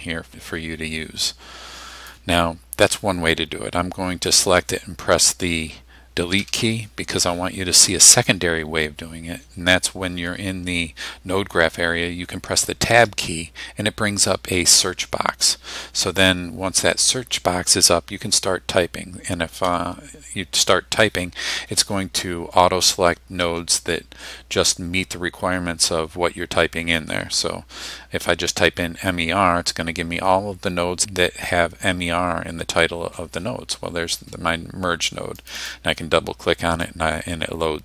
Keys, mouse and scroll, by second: 4.4 click, 6.4 Delete, 8.2 click, 13.1 Tab, 19.6 m, 23.4 e, 27.4 r, 35.4 click, 36.9-37.8 drag.